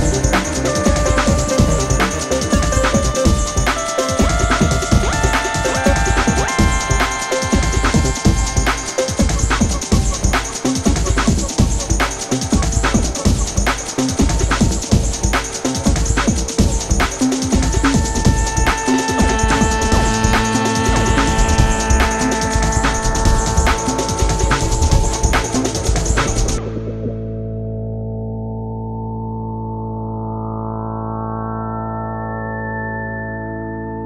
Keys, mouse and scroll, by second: 1.8 click, 4.6-5.8 scroll down 1, 5.8-7.8 scroll up 1, 8.0 click, 8.8 ctrl+a, 9.8 click, 10.9-11.9 scroll down 1, 12.1 click, 15.6-15.9 drag, 17.8-19.5 drag, 21.1 alt+scroll down 1, 21.4 alt+click, 21.8 alt+scroll up 1, 22.3-24.3 drag, 24.9-25.6 drag, 27.8 ctrl+a, 28.8-29.2 click, 29.6 Tab, 31.1 click, 31.7-32.8 typing.